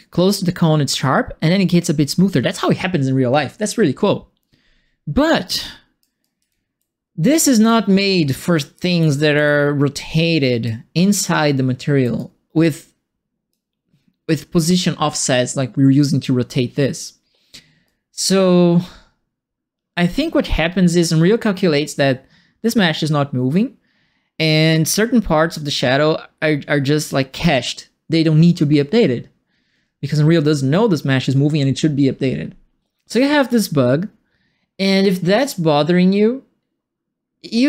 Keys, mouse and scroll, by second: 5.1 right click, 5.3 right click, 6.1-7.3 typing, 6.2-7.6 right drag, 8.4-10.6 right drag, 8.4-9.7 typing, 11.2 right click, 12.1-13.5 right drag, 17.8-20.8 right drag.